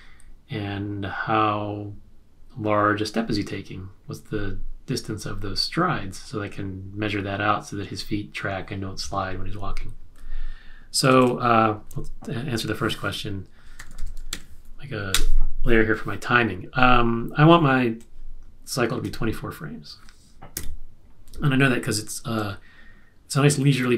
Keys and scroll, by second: 13.5-14.7 typing, 15.1 Return, 20.5 F5.